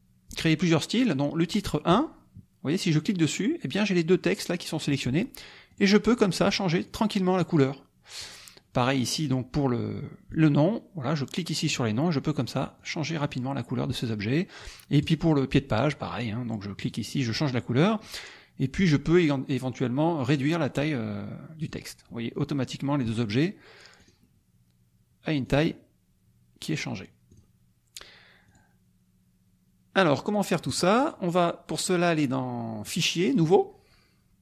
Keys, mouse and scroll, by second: 1.8 click, 6.0 click, 6.4 click, 6.8 click, 7.3 click, 10.3 click, 12.8 click, 13.2 click, 15.0 click, 16.9 click, 20.3 click, 21.5 click, 24.0 click, 25.4 click, 27.3 click, 28.5 click, 30.6 click, 32.8 click.